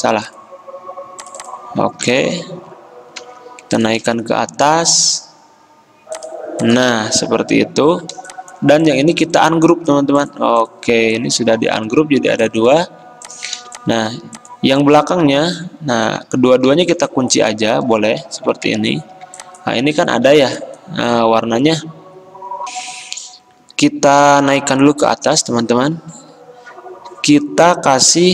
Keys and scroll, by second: 2.1 ctrl+v, 2.2 Return, 11.7 ctrl+z, 12.9 ctrl+z, 15.6 ctrl+z, 16.7 ctrl+2, 18.3 ctrl+z, 19.0 ctrl+2, 20.1 ctrl+z, 21.2 ctrl+z, 22.7 F10.